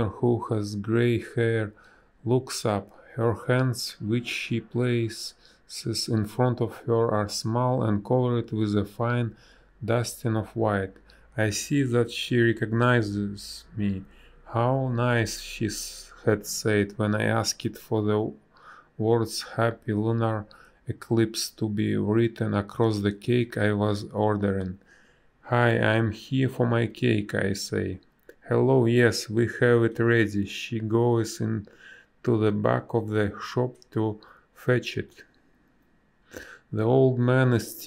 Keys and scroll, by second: 8.0 space, 9.1 space, 13.6 space, 15.7 space, 16.6 ctrl+z, 16.7 space, 22.0 space, 27.8 a, 32.9 space, 34.1 b.